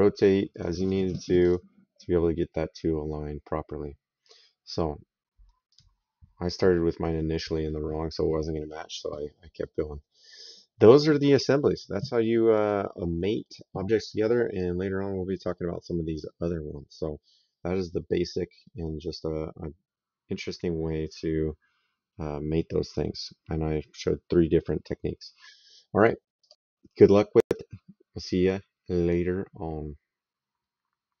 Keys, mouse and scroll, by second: 4.1 click, 5.5 click, 7.5 middle click, 12.5 click, 13.9 middle click, 18.5 middle click, 19.0 right click, 26.3 click.